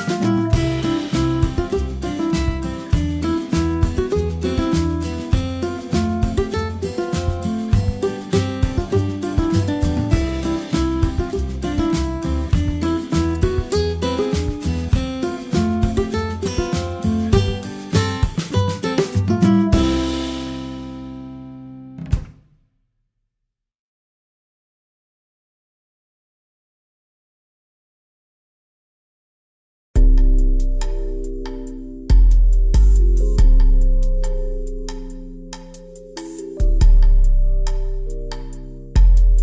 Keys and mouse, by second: 0.0 middle click, 0.3 middle click, 3.7 a, 4.5 a, 5.7-9.4 typing, 10.4 a, 11.5 ctrl+a, 12.7 ctrl+a, 13.5 a, 14.6 ctrl+j, 14.7 g, 15.1 a, 19.3 middle drag, 19.7 g, 20.7 r, 22.1 g, 23.2 g, 24.4 r, 26.2 r, 28.2 g, 30.5 r, 32.6 g, 33.4 r, 34.7 g, 35.9 r, 37.2 r, 37.9 g.